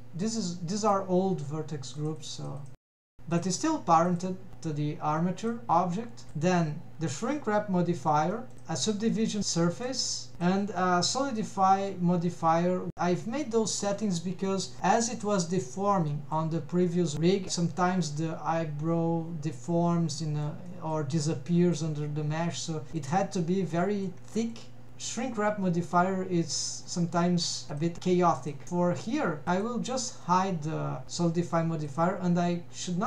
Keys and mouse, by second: 0.8 click, 2.1 click, 2.9 click, 3.8 middle drag, 4.3 click, 6.7 click, 7.3-7.6 shift+middle drag, 8.4 middle click, 8.9 drag, 9.3 click, 10.7 drag, 14.0 click, 14.9 click, 15.3-17.4 middle drag, 18.7 click, 19.2-19.8 middle drag, 20.3 middle drag, 22.2-22.6 middle drag, 23.4-24.0 middle drag, 24.4 middle click, 25.0-25.6 middle drag, 26.7 middle drag, 27.3 middle drag, 28.1 middle click, 29.1 drag, 30.7 click, 31.1 middle drag, 31.9 click.